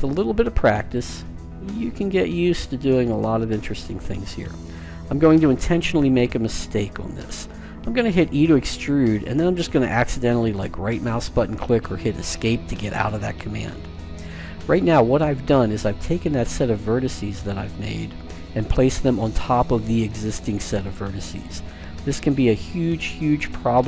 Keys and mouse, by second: 1.1-2.9 drag, 7.9 e.